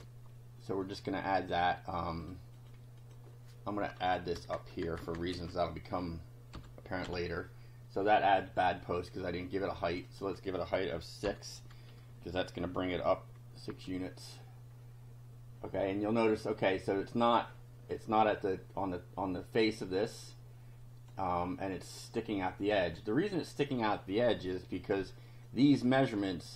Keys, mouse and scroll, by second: 0.8 click, 2.3 click, 2.6 click, 3.0 click, 4.4 Return, 5.4 ctrl+v, 6.6 ;, 7.0 F5, 9.8 click, 11.3 6, 13.7 F5, 14.4-16.4 drag, 20.3-21.3 drag, 22.5 click, 25.5-26.5 drag.